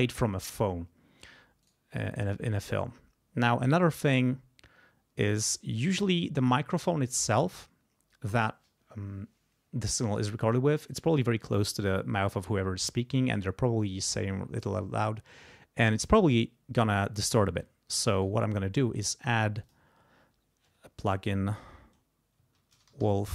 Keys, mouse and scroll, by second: 1.6 right click, 5.9 click, 18.2 right click, 19.6 click, 22.3-23.3 typing.